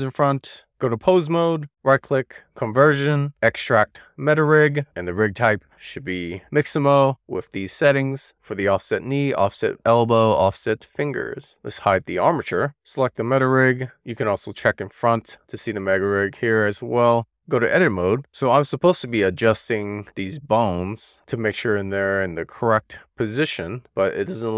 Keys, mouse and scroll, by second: 0.7 click, 4.7-12.4 right drag, 12.4 click, 12.9 click, 15.2 click, 16.5-17.3 scroll up 2, 17.3-18.4 drag, 19.1 shift+middle click, 19.8 click, 21.4-23.1 middle drag, 23.8 w.